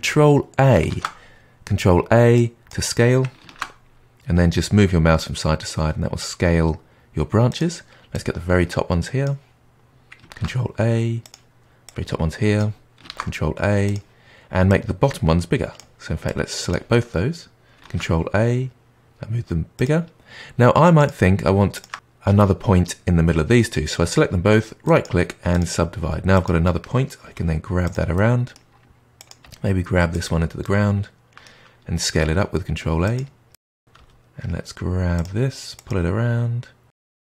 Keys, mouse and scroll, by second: 0.8 ctrl+a, 3.4 ctrl+a, 8.1 click, 10.3 ctrl+a, 11.8 click, 13.0 ctrl+a, 14.6 click, 16.2 click, 17.8 ctrl+a, 20.9 click, 21.7 shift+click, 24.8-26.3 right drag, 26.3 click, 27.2 g, 28.1-29.1 middle drag, 29.1 click, 29.4 g, 30.6-32.2 middle drag, 32.2 ctrl+a, 33.4-34.5 middle drag, 34.5 click, 34.9 g, 35.8 click, 35.8 g.